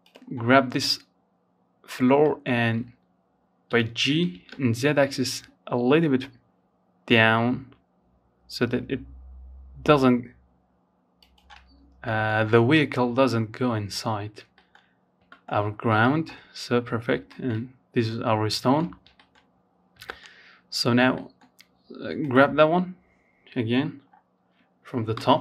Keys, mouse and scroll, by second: 0.4 shift+middle click, 0.7-1.8 scroll up 1, 1.8 g, 9.8-10.2 scroll down 1, 10.2 middle click, 10.5-10.9 scroll up 1, 10.9 shift+middle click, 11.2 scroll down 1, 12.1-12.7 scroll down 4, 12.7-13.8 shift+middle drag, 13.8-14.2 scroll up 2, 14.2 shift+middle click, 14.6-15.4 scroll up 1, 15.4 shift+middle click, 16.0-16.8 scroll down 4, 16.8 shift+middle click, 17.1-17.9 scroll up 2, 17.3 shift+middle click, 17.9-18.2 scroll down 2, 18.2 shift+middle click, 18.5-19.3 scroll up 2, 19.3-20.4 middle drag, 20.4-22.2 drag, 22.2-22.8 scroll down 1, 22.8-23.3 scroll down 1, 23.3 KP_7, 24.1-24.5 scroll down 4, 24.5-25.4 shift+middle drag.